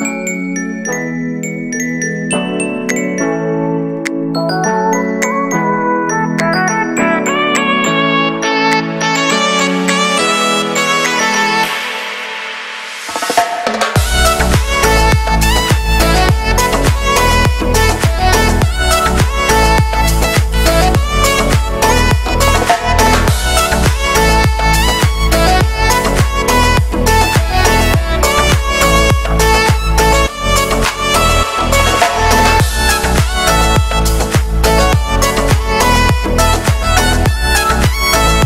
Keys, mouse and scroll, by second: 0.1 g, 1.5-3.6 middle drag, 3.6 click, 3.8 g, 4.4 Tab, 4.6 scroll down 1, 4.8 shift+middle click, 5.7 shift+middle click, 6.5-6.9 scroll up 1, 7.1 scroll down 1, 7.3 middle click, 7.8 Tab, 8.1-9.1 shift+middle drag, 9.1 click, 9.4-10.3 scroll up 1, 10.3 right click, 10.6 shift+s, 11.7 shift+a, 13.9 m, 15.2-15.7 scroll up 1, 15.7 g, 16.4 z, 16.8 scroll up 1, 17.6-18.6 drag, 18.6 g, 20.2 a, 20.7 a, 20.8 a, 21.3 b, 23.0 scroll up 2, 23.2 shift+middle click, 23.7 e, 25.1 g, 26.6-27.1 scroll up 1, 27.1 shift+right click, 27.2 w, 28.6 shift+right click, 29.0 w, 29.7 right click, 30.1 ctrl+shift+b, 31.2 scroll down 1, 31.4 middle click, 32.1 scroll up 2, 32.9 right click, 33.1 k, 34.2 ctrl+KP_Add, 34.4 ctrl+KP_Add, 34.8 s, 36.6 right click, 37.0 shift+right click, 37.3 g.